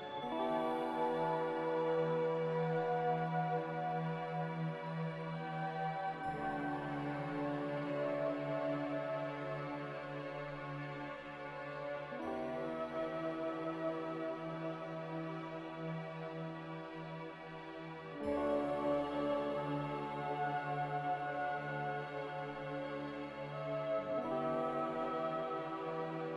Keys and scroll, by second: 0.0-0.1 typing, 7.0 z, 8.8-9.6 typing, 11.5 typing, 14.9 r, 19.6 a.